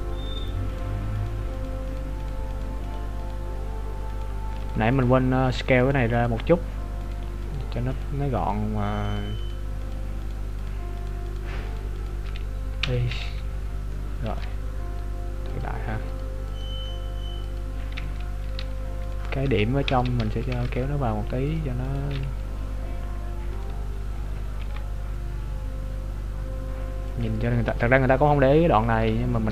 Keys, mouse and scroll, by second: 0.5 shift+right click, 0.7 shift+right click, 1.3 shift+right click, 1.6 shift+right click, 2.0 shift+right click, 2.2 shift+right click, 2.7 shift+right click, 2.9 shift+right click, 3.2 shift+right click, 4.2 shift+right click, 4.6 shift+right click, 5.1 shift+right click, 5.5 shift+right click, 5.9 shift+right click, 6.1 shift+right click, 7.2 shift+right click, 7.5 shift+right click, 8.0 shift+right click, 8.5 shift+right click, 9.1 shift+right click, 9.6 shift+right click, 9.9 shift+right click, 10.3 shift+right click, 10.6 shift+right click, 11.0 shift+right click, 11.3 shift+right click, 11.7 shift+right click, 12.0 shift+right click, 12.8 i, 13.9 middle click, 15.6 click, 18.0 z, 19.1 right click, 19.5 KP_3, 20.0 z, 20.7 ctrl+Tab, 21.9 right click, 22.7 scroll up 1, 23.5 scroll up 7, 23.5 right click, 24.0-24.7 scroll down 7, 24.7 g, 27.5 z, 27.8 scroll down 2, 28.3 middle click.